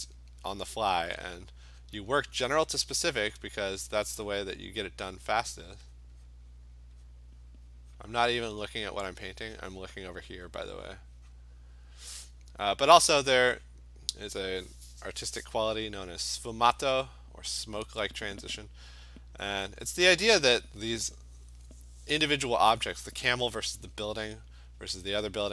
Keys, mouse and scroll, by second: 2.5 click, 2.9 click, 3.4 click, 4.4 click, 5.0 click, 6.0 click, 6.3 click, 6.6 click, 6.9 click, 7.1 click, 7.3 click, 7.5 click, 7.8 click, 8.0 click, 8.5 click, 8.7 click, 8.9 click, 9.2 click, 11.0 click, 11.4 click, 13.3 click, 13.7 click, 16.2 click, 16.5 click, 17.0 click, 17.8 click, 20.2 click, 23.8 click.